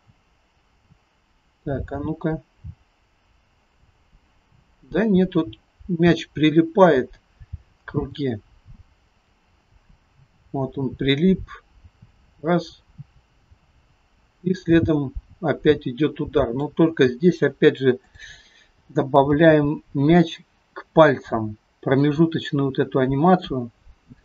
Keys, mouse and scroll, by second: 18.1 click, 19.3 g, 23.6 middle click.